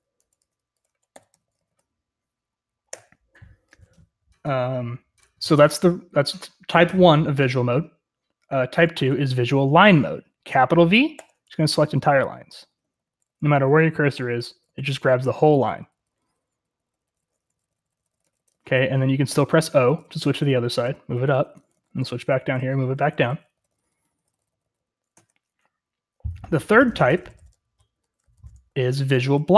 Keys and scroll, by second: 0.0-3.4 typing, 10.9-25.7 typing, 26.9-28.7 typing.